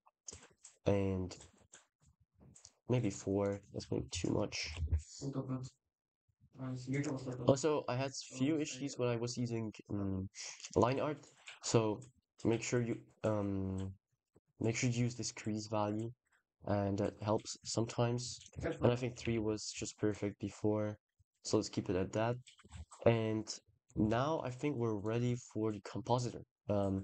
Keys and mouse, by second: 2.9 click, 3.3-7.0 shift+drag, 18.2-21.9 shift+drag, 23.9 ctrl+s, 24.8 click, 25.1 click.